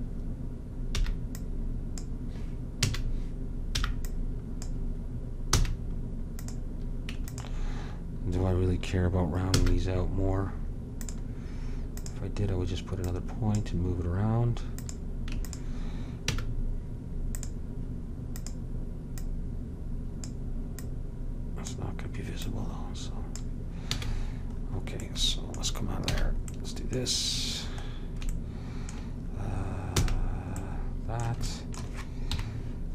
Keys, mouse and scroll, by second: 1.2 b, 3.0 a, 3.9 b, 5.7 f, 9.1 click, 9.7 w, 12.1-13.2 drag, 16.4 w, 23.6 click, 24.0 a, 24.3 click, 26.3 a, 30.1 f, 32.5 KP_Decimal.